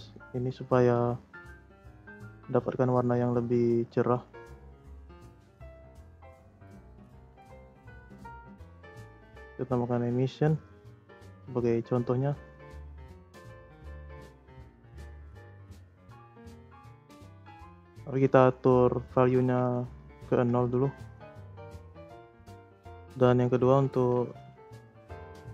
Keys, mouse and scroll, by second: 0.1-0.5 scroll up 7, 0.5-1.5 middle drag, 1.5-2.1 scroll up 7, 2.1-4.1 middle drag, 4.1-5.0 scroll down 2, 5.0 middle click, 5.7 click, 5.9 shift+a, 8.6 click, 8.9 shift+a, 11.7 click, 12.2 click, 13.3 click, 15.1-15.6 scroll up 4, 15.6 click, 18.1 click, 19.2-20.6 drag, 20.8 scroll down 3, 21.1-22.9 middle drag, 22.9 click, 23.2 middle click, 23.4 scroll up 3, 23.6 click, 23.9 shift+a.